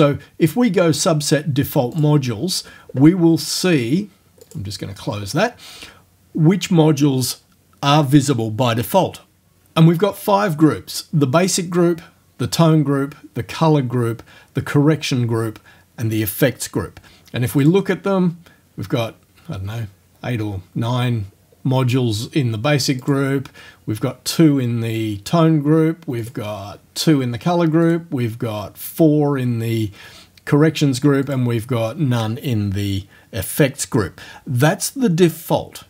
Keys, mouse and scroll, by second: 2.0 click, 4.4 click, 17.6 click, 23.0 click, 26.2 click, 27.9 click, 31.3 click.